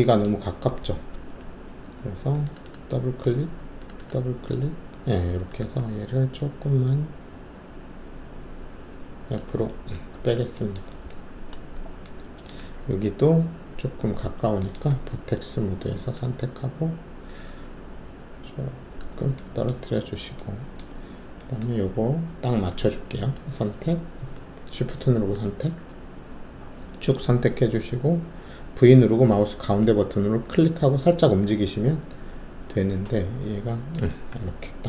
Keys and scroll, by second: 1.1 alt+2, 5.6 shift+w, 10.1 alt+`, 13.8 alt+2, 14.9 alt+1, 28.8-29.6 typing, 31.2 typing, 32.3-33.8 typing.